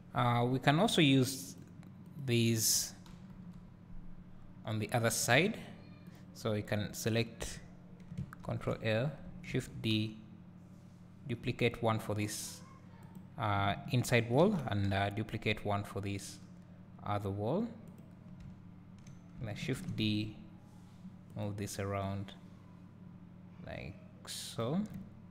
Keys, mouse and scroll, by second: 2.2 click, 3.3 KP_7, 5.5 Tab, 6.2 click, 8.4 ctrl+l, 8.6 ctrl+l, 9.6 shift+d, 13.2 click, 14.5 shift+d, 18.0 click, 19.9 shift+d, 21.4 click, 22.2-25.3 drag, 25.0 `.